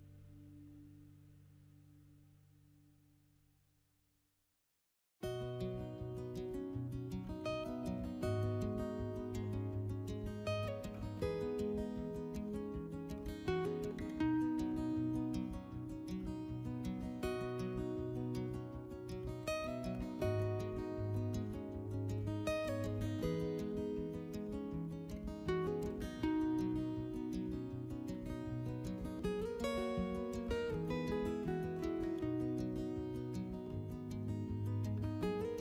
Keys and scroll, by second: 1.3 3, 3.7 s, 5.4 alt+q, 5.7 alt+q, 9.9 4, 10.2 s, 14.0 w, 26.9 3, 31.1 4, 31.4 s, 32.1 4, 32.5 s.